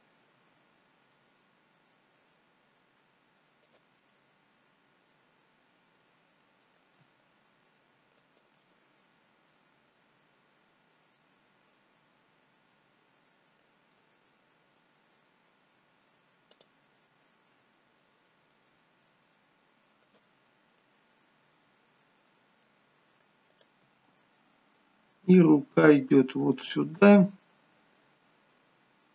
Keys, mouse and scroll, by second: 0.4 g, 4.1 middle click, 7.0 middle click, 7.0 g, 8.7 middle click, 10.4-11.2 scroll down 1, 11.2 middle click, 11.2-11.6 scroll down 1, 16.6 click, 16.9 g, 20.7 middle click, 23.5 click, 24.0 g.